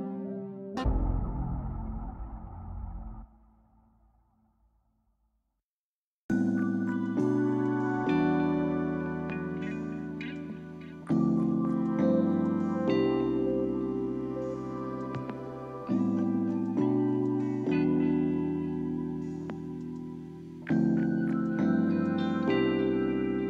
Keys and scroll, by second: 14.5 space, 19.0 space.